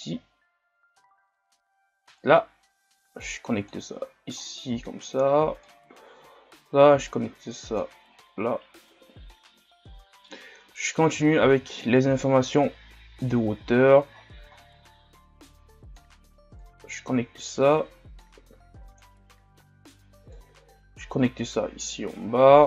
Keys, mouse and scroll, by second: 0.0 click, 3.8 click, 4.1-5.6 scroll down 5, 5.6-6.2 scroll down 1, 6.2-8.6 scroll down 1, 8.6 click, 10.9 click, 11.4 shift+d, 15.5-21.9 drag.